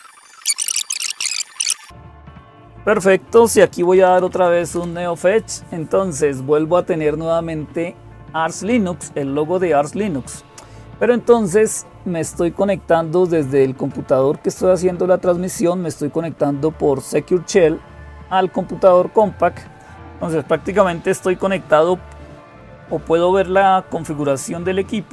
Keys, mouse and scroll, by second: 0.0-25.1 typing, 0.3 super+Return, 4.5 Return.